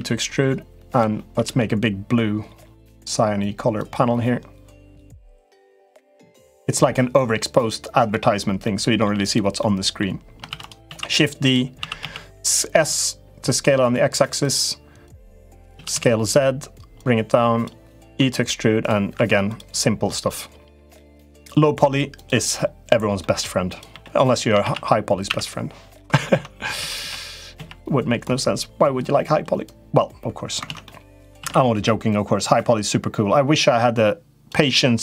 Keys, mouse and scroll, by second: 1.1 a, 1.3 g, 5.0 g, 8.4 middle click, 9.0 click, 9.3 middle click, 10.2 shift+d, 10.6 s, 11.5 s, 14.9 click, 15.5 s, 16.7 click, 17.8 e, 19.0 2, 19.3 click, 20.0 click, 20.9 click, 21.9 click, 22.9 middle click, 23.4 click, 23.7 l, 24.4 shift+d, 26.1 ctrl+z, 26.5 s, 29.4 click, 30.4 ctrl+z, 30.6 middle click, 31.1 shift+d, 32.2-34.2 drag.